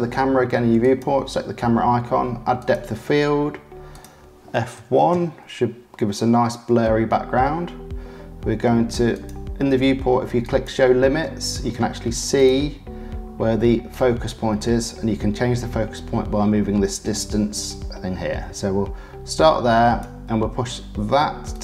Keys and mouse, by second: 0.9 click, 1.1-2.6 middle drag, 2.6 click, 2.7-4.1 middle drag, 4.1-6.1 drag, 6.1-9.1 middle drag, 9.1 click, 9.3-10.5 middle drag, 10.5-12.5 drag, 13.9-19.9 drag, 21.5 click.